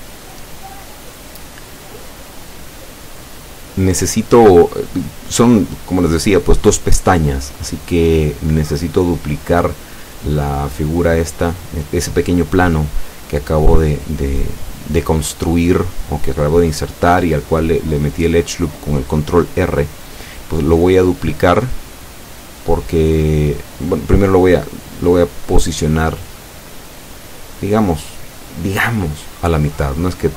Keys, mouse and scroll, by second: 0.4-7.2 drag, 7.9 shift+middle click, 8.0 scroll up 1, 8.6 middle click, 9.1 scroll up 1, 28.5 scroll up 2, 28.6-29.9 middle drag.